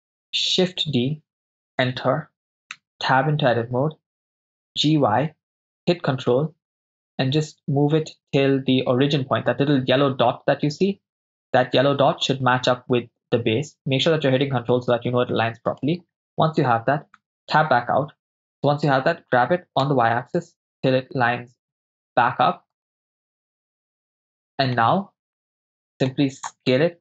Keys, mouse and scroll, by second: 0.8 shift+d, 1.8 Return, 2.7 Tab, 4.7 g, 4.9 y, 15.7-17.3 ctrl+drag, 17.3 Tab, 18.4 ctrl+z, 18.4 right click, 19.4 g, 19.9 y, 22.8 ctrl+click, 24.2-24.9 shift+middle drag, 25.4-26.1 ctrl+middle drag, 26.7 s.